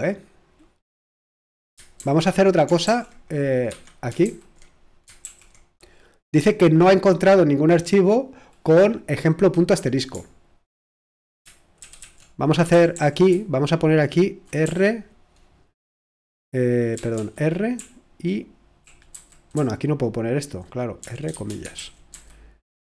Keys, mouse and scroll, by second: 2.0 super+h, 2.8 super+l, 3.7 Escape, 4.2 super+h, 11.8 ctrl+w, 12.0 ctrl+w, 12.7-14.6 typing, 16.5-22.9 typing.